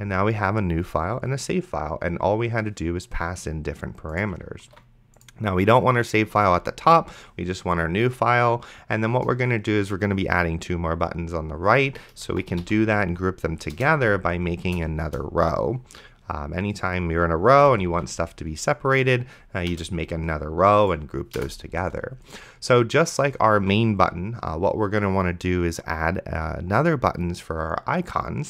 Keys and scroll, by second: 4.9 ctrl+x, 6.7 ctrl+s, 9.1 Return, 12.3-14.0 typing, 13.8 Return, 14.7 Return, 17.6 ,, 18.2 ctrl+s, 19.7 Return, 21.4 BackSpace, 23.6 Tab.